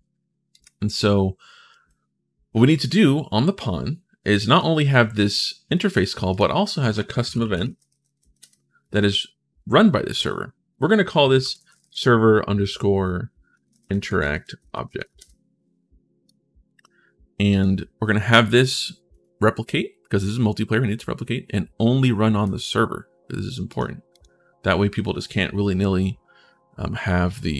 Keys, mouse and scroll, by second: 0.3 click, 1.5 click, 2.5 right click, 4.3-5.7 drag, 6.1 right click, 6.7-8.5 typing, 10.9-12.0 typing, 13.3-15.2 typing, 16.0 click, 17.3 click, 18.9 click, 22.2 click, 23.5 click, 23.9 click.